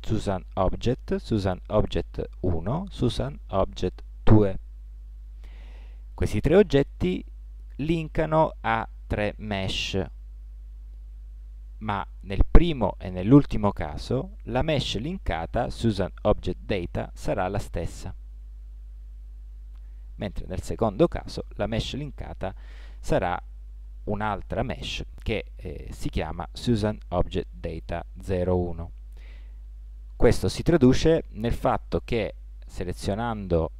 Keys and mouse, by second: 32.6 Tab.